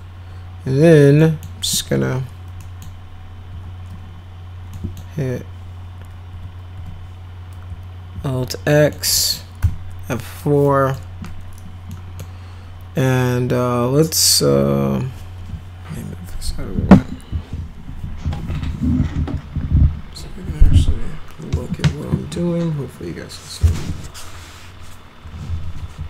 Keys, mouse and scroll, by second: 1.1 middle click, 2.5 middle click, 3.4 e, 4.6 middle click, 6.7 F3, 8.1 alt+x, 8.6 middle click, 9.1 middle click, 9.5 F4, 10.6 middle click, 11.9-12.2 middle drag.